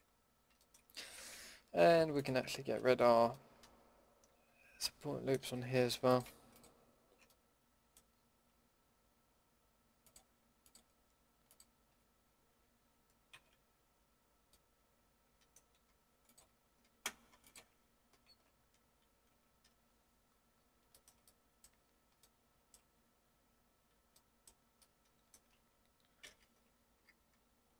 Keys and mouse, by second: 2.7 KP_Decimal, 5.4 a, 7.3-8.2 middle drag, 13.3 ctrl+x, 14.5-15.5 middle drag, 18.2 ctrl+x, 18.6 click, 20.3-20.9 middle drag, 23.3 middle click, 24.3 middle drag, 26.2 ctrl+z, 26.9 a.